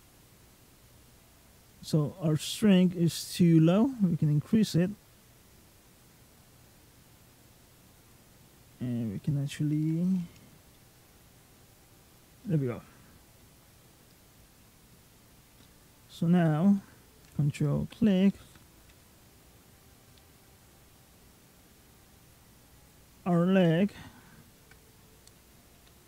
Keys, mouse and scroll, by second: 0.5 click, 3.1 click, 4.4 click, 5.6 click, 6.5 middle click, 7.3 click, 8.2-9.2 scroll up 7, 10.6 shift+middle click, 11.5 click, 12.3 middle click, 12.7-13.4 scroll down 4, 13.2 middle click, 14.4-15.4 scroll down 6, 15.4 middle click, 17.5 ctrl+click, 18.6 g, 24.4 ctrl+click, 25.6 g.